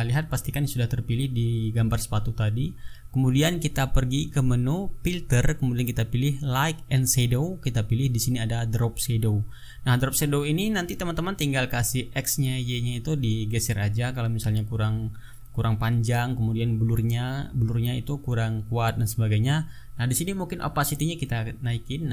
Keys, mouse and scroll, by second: 0.1 click, 4.9 click, 8.8 click, 13.9 click, 16.5 click, 17.5 click, 18.4 click, 19.3 click, 21.1 click.